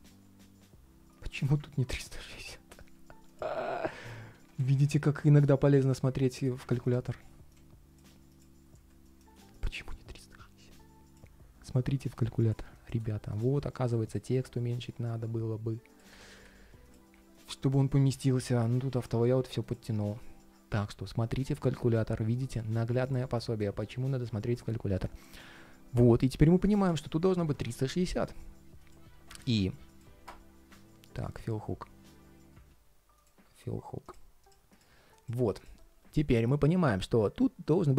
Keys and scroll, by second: 8.4 alt+h.